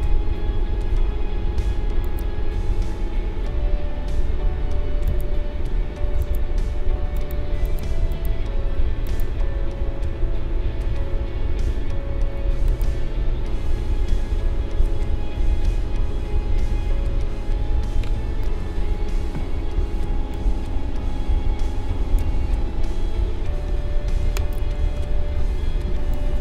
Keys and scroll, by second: 20.0 space.